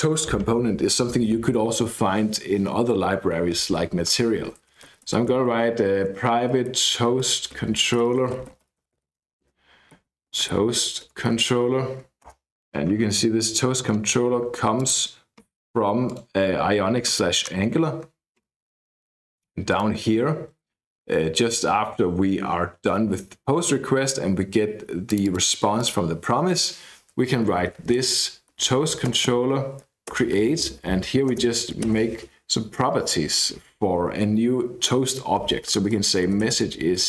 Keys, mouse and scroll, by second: 3.9-5.4 typing, 6.5-11.8 typing, 12.3 Return, 13.4 click, 13.9-14.6 scroll up 1, 14.8 click, 16.1 click, 17.5-18.9 scroll down 1, 18.9-19.6 scroll up 1, 19.7 click, 25.1 click, 25.8 click, 27.4-30.8 typing, 30.2 Return, 31.8 ctrl+space, 35.7 Return, 36.5 shift+;, 36.5 shift+space, 36.7 '.